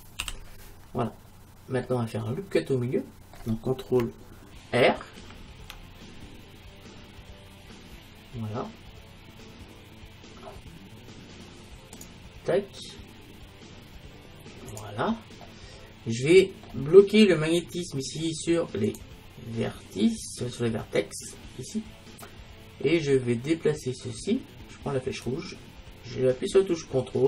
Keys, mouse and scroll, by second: 0.3 j, 5.2 ctrl+r, 14.9-16.6 drag, 15.5-17.3 middle drag, 18.9-20.8 drag, 22.3-24.2 middle drag, 25.3-27.2 drag.